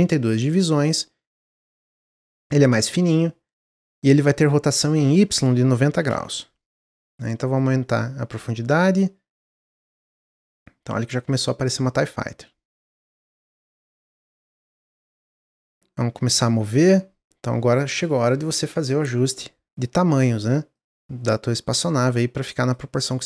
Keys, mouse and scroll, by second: 0.9-3.9 drag, 4.9-10.7 drag, 14.0-15.4 middle drag, 15.4-18.0 drag, 18.0-18.8 middle drag, 18.8-22.0 drag, 22.9 click.